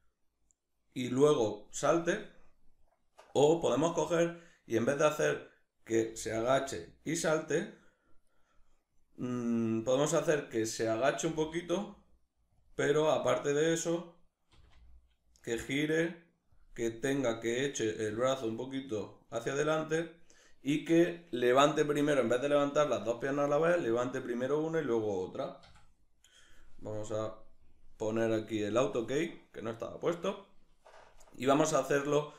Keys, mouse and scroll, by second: 0.7 right click, 8.0 right click, 10.9 g, 12.3 click, 12.6-14.1 right drag, 14.1 r, 16.2 click, 17.1 right click, 17.6 g, 18.6 right click, 26.6-32.3 drag.